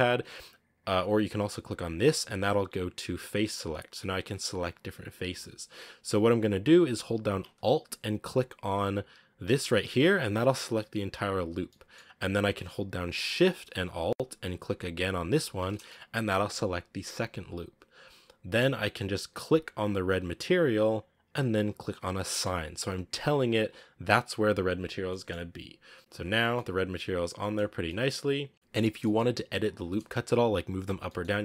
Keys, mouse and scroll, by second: 0.1-1.9 scroll up 1, 1.9-3.5 drag, 3.5 right click, 4.0 right click, 4.3 right click, 4.7 right click, 5.1 right click, 9.3 alt+right click, 11.7-15.4 middle drag, 15.4 alt+shift+right click, 15.7-20.0 middle drag, 20.0 click, 22.3-24.8 drag, 24.8 scroll down 1, 24.9 middle click, 25.7 scroll up 1, 26.0 Tab, 26.4 middle click, 27.4 scroll down 4, 27.7-28.5 middle drag, 28.5 scroll down 1, 28.7-30.9 scroll up 4, 28.8 middle click, 30.9 middle click, 31.3 Tab.